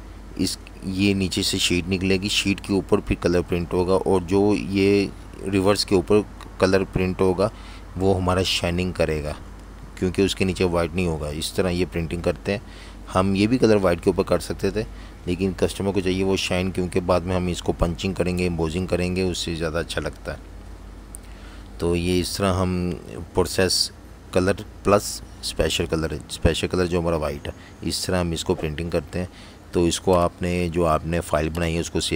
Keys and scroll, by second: 15.2 z, 15.4 z, 16.5 v, 23.7 super+0, 27.6 shift+super+s, 31.7 shift+super+v.